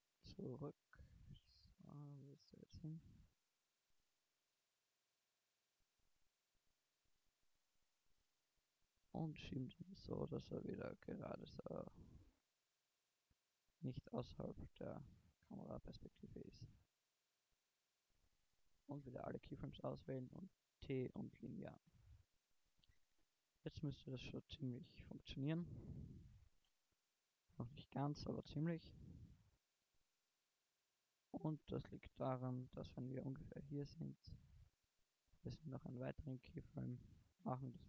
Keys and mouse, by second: 3.9-7.1 middle drag, 7.1 KP_0, 15.8 i, 18.5 a, 18.8 a, 20.0 t, 22.0 shift+Left, 22.5 alt+a, 29.5 alt+a.